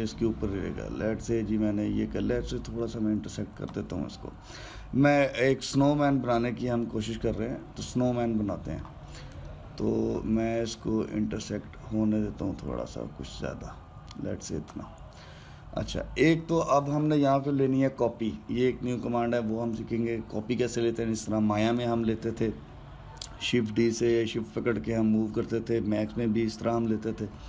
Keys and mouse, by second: 8.2-12.2 middle drag, 12.2 click, 16.2-19.3 middle drag.